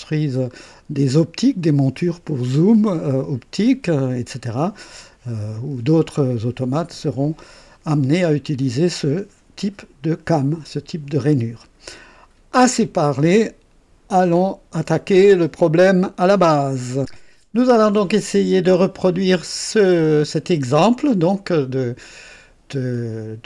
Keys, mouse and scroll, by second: 0.4-1.2 scroll down 4, 18.8-23.2 drag.